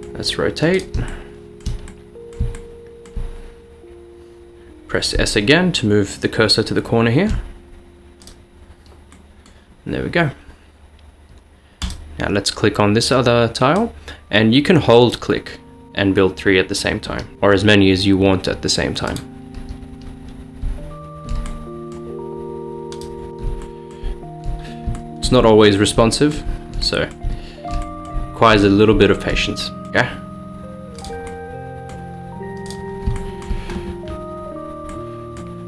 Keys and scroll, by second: 0.0-0.8 typing, 5.3-7.7 typing, 10.2 typing, 12.7-13.4 typing, 17.3 s, 20.7 s, 21.3 s, 21.5 s, 23.3 s, 23.5 s, 24.2 s, 25.5-29.9 typing, 32.5 typing.